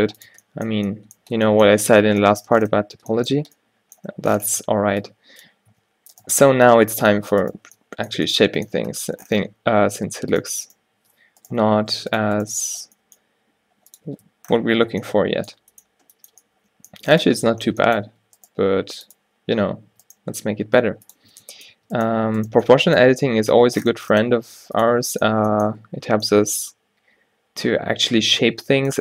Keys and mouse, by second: 0.0-0.1 typing, 0.4 Tab, 0.8 right click, 3.5 Tab, 4.7-6.8 typing, 6.3-8.5 drag, 7.8 Tab, 10.1 Tab, 11.6 o, 13.0 g, 14.2 Tab, 18.2 Tab, 18.7 g, 19.8 Tab, 20.0 Tab, 20.3 g, 21.4 Tab, 21.8 Tab, 23.2 g, 25.0 Tab.